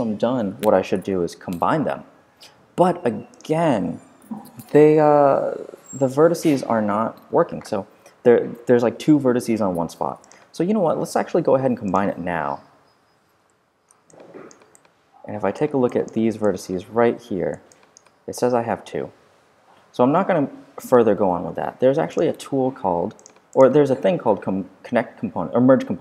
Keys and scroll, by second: 17.2 4, 19.5 5.